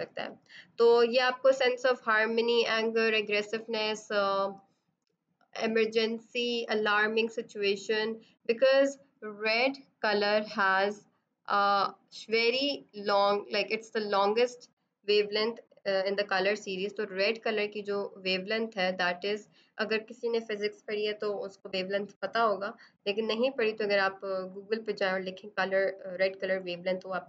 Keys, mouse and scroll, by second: 1.8 click, 9.3 click, 17.1 click.